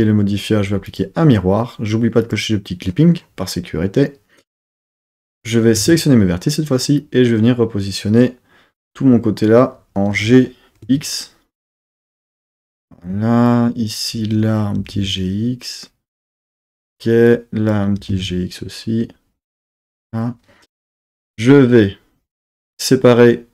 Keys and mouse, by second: 2.2 click, 4.7 z, 5.3 Tab, 5.8 1, 7.0 click, 8.4 click, 10.1 g, 10.9 x, 12.8 click, 13.5 click, 14.8 g, 15.0 x, 16.5 click, 17.3 click, 18.0 g, 18.1 x, 19.8 click, 22.4-23.5 drag.